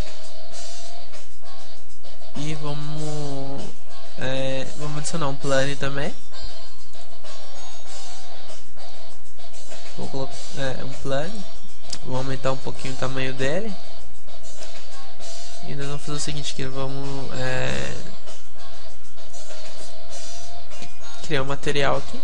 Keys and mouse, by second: 0.0-4.1 drag, 4.1-7.3 middle drag, 8.2 alt+g, 8.6 middle click, 11.6-13.3 drag, 11.6 shift+a, 12.4 s, 14.1-15.5 drag.